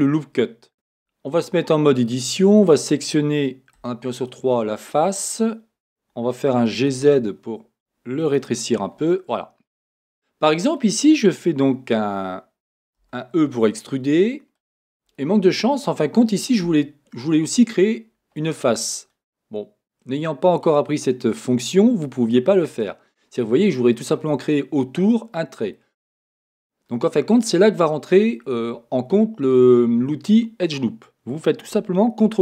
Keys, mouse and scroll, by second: 0.8 Tab, 2.5 click, 3.7 click, 3.7 3, 6.6 g, 8.3 click, 9.1-14.7 middle drag, 12.7-13.0 scroll up 1, 13.0 e, 14.7 click, 15.1-21.4 middle drag, 22.8-23.3 scroll up 1, 25.7 scroll up 1, 25.7 middle click, 28.7-32.2 middle drag.